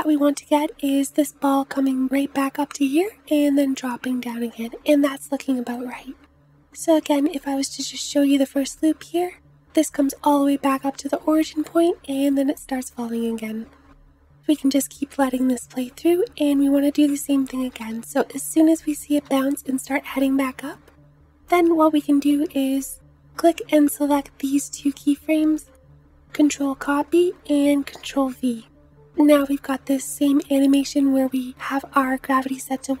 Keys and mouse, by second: 0.2 space, 3.3 space, 4.7 space, 6.7 space, 7.3 space, 9.7 space, 11.2 space, 11.7 space, 14.2 space, 15.0 space, 16.4 Left, 16.6 Left, 16.7 Left, 16.9 Left, 17.0 Left, 17.1 Left, 17.3 Left, 17.4 Left, 17.6 Left, 17.7 Left, 18.0 Left, 18.4 Left, 19.1 Left, 20.5 Right, 20.8 Right, 21.2 Right, 21.6 Right, 26.6 ctrl+c, 27.9 ctrl+v.